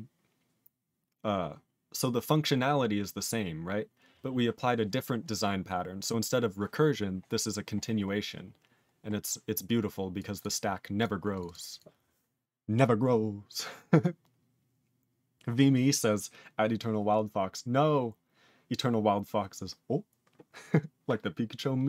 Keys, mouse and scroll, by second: 5.5-6.7 scroll down 2, 8.1 scroll down 1, 8.9-10.1 scroll down 5, 10.2 click, 10.4 click, 10.6-11.0 scroll down 2, 11.0 click, 11.0 click, 11.3 click, 11.4 click, 11.4 double click, 11.5 double click, 11.7 click, 11.7 click.